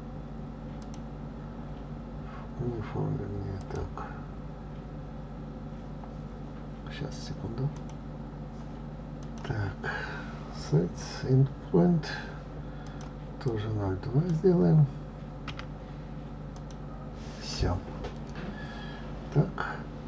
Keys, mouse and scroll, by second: 1.4 scroll down 2, 1.6-4.7 drag, 10.4-11.7 drag.